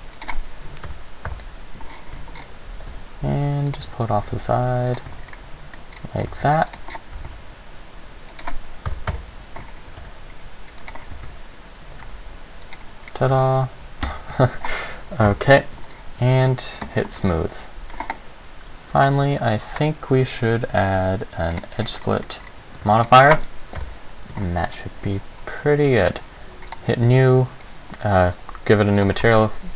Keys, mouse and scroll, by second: 0.5 click, 1.1 KP_7, 1.5 KP_Decimal, 2.1-2.9 scroll down 5, 2.3 z, 2.9 g, 3.9 click, 4.0 z, 4.5 g, 5.1 click, 5.3 z, 5.5 middle click, 6.1-6.5 scroll down 2, 6.5 s, 6.9 click, 7.1 scroll down 4, 7.3 s, 8.6 click, 9.1 Right, 9.3 KP_0, 10.1 g, 11.1 click, 11.3 s, 12.9 click, 13.3 scroll down 1, 13.5 Tab, 14.2 Tab, 14.5 z, 15.5 KP_0, 16.9 click, 17.3 middle click, 19.1 click, 19.9 click, 22.2 middle click, 22.6-23.2 scroll down 3, 23.0 ctrl+s, 23.9 KP_0, 24.7-25.4 scroll up 1, 25.4 scroll up 1, 26.2 click, 26.9 click, 29.1 click.